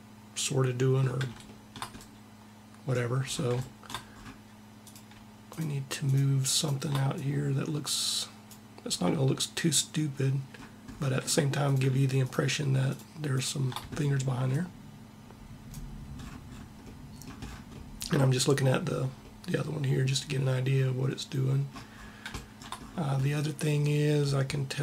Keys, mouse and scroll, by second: 1.8-4.6 middle drag, 4.6 click, 6.9-8.1 drag, 8.5 middle click, 11.3-14.7 drag, 15.8 middle click.